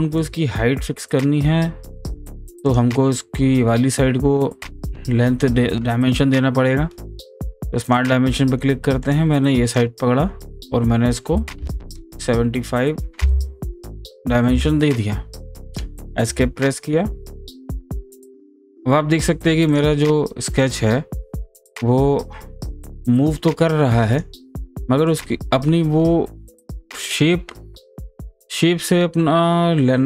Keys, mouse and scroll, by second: 7.9 click, 9.1 click, 9.7 click, 19.7 click, 19.7-25.1 drag, 25.1-28.9 drag.